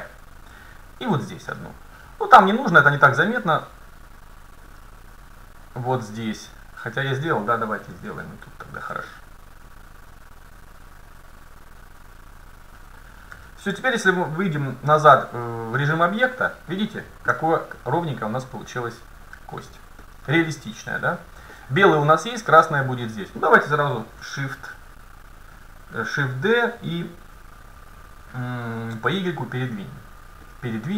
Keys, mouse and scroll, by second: 1.1 ctrl+r, 7.9 a, 8.7 ctrl+r, 12.2-13.9 drag, 13.4 a, 13.8 Tab, 14.9 Tab, 16.5-18.0 middle drag, 18.2 middle click, 18.4 middle click, 18.6 middle click, 20.1-23.2 middle drag, 20.3 KP_7, 24.1 shift+d.